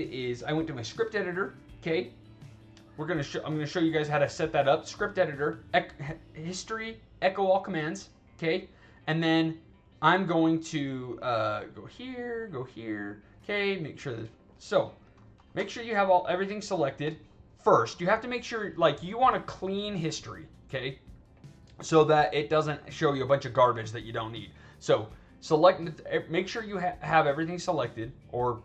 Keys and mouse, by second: 0.8 click, 2.1 click, 4.1 click, 6.3 click, 9.1 click, 11.5 click, 12.3 click, 14.1 click, 15.6 alt+middle click, 15.9 alt+right click, 16.4 alt+right click, 17.0 click.